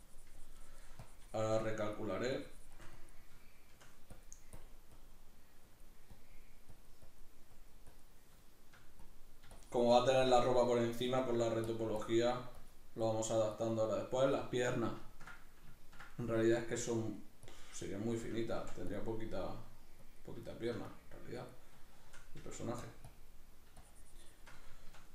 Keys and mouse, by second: 3.4 shift+middle click, 4.1-8.5 drag, 8.5 shift+middle click, 9.1-10.5 drag, 10.5 shift+middle click, 11.3 f, 11.7 click, 14.3 middle click, 17.1-19.0 drag, 18.6 f, 20.5 shift+middle click, 20.9-21.9 drag, 21.9 shift+middle click, 22.4 f, 22.9 click, 23.8-24.8 shift+drag, 24.8-25.1 shift+middle drag.